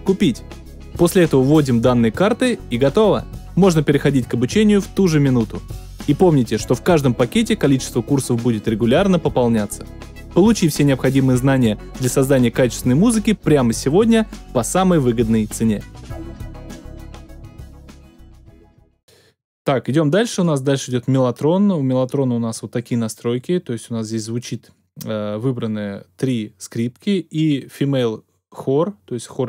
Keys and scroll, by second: 19.0 space.